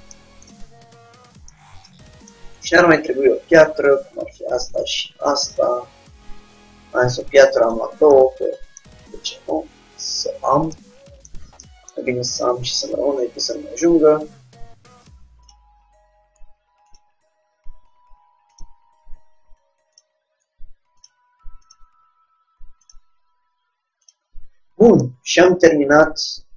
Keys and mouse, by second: 0.0 click, 0.5-1.7 middle drag, 1.7 click, 1.8 middle click, 2.0 click, 3.8 middle click, 4.3-5.4 drag, 5.4 shift+d, 6.5 click, 8.0-9.8 drag, 9.8 middle click, 9.9 KP_3, 11.1 middle click, 11.9 middle click, 13.0 g, 16.0-17.1 middle drag, 17.1-18.6 drag, 17.4 g, 19.1 r, 20.5 g, 21.2-23.9 drag, 22.0 r, 23.2 g.